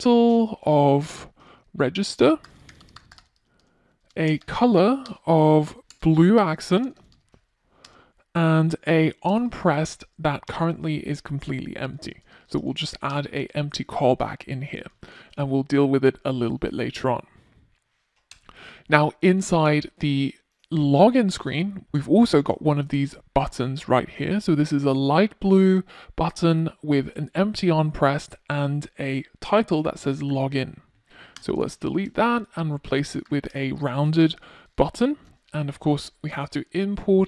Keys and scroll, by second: 2.2 Return, 12.5 super+s, 35.9 Return.